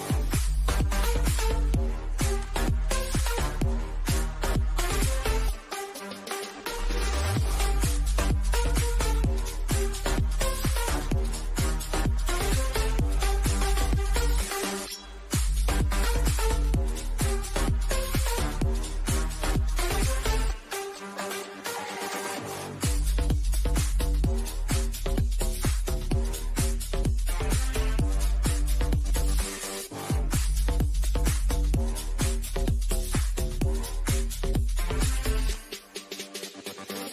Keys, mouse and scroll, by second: 1.4 click, 2.8-3.4 scroll down 2, 3.7 click, 4.2-4.8 scroll down 1, 5.4 click, 6.9-7.5 scroll up 1, 9.4-12.2 shift+middle drag, 12.2-14.4 shift+middle drag, 14.6 middle click, 15.1 scroll, 15.4 middle click, 16.3-16.7 scroll up 1, 16.7 middle click, 18.0 middle click, 19.1-19.6 scroll up 1, 20.4-22.4 shift+middle drag, 22.4-22.8 scroll down 1, 23.6-26.6 middle drag, 26.6-31.8 middle drag, 31.8 click, 34.5 click.